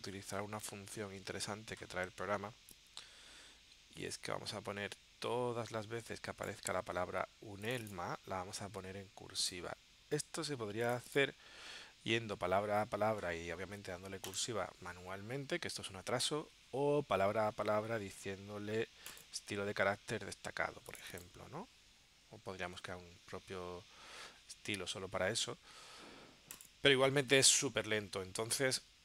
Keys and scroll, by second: 16.1 super+z, 23.0 super+z.